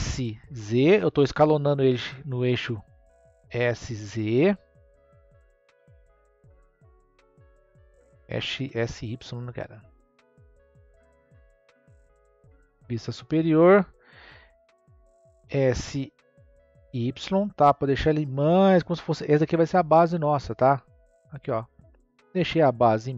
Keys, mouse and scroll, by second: 3.4 s, 5.5-8.0 middle drag, 8.0 s, 15.4 s, 20.5 click.